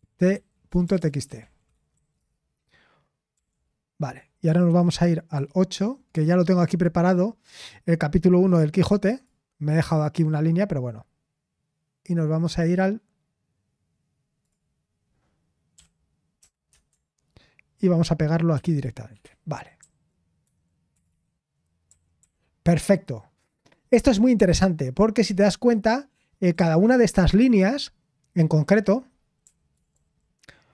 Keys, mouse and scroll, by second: 0.0-3.8 typing, 5.3 super+8, 9.1-19.1 drag, 19.1 Escape, 19.8-22.2 typing, 29.4-29.9 typing.